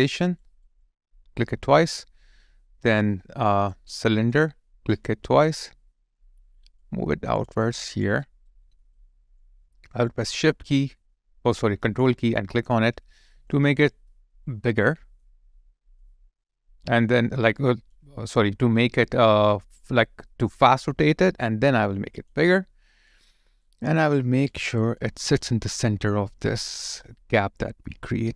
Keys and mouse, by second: 0.2 double click, 4.1 double click, 5.6 alt+middle click, 7.6 alt+click, 8.2 alt+right click, 8.6 alt+middle click, 8.9 alt+click, 12.2 ctrl+click, 13.5 alt+double click, 14.1 alt+middle click, 14.4 alt+click, 15.0 alt+middle click, 22.5 alt+click, 24.9 alt+click.